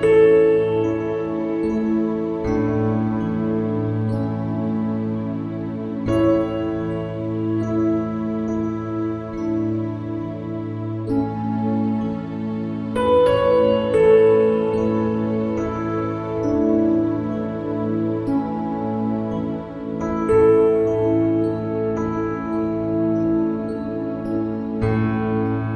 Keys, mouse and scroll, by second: 7.8 x, 10.7-12.8 drag, 12.0 s, 15.2-19.1 middle drag, 19.1 ctrl+r, 23.9-25.7 drag.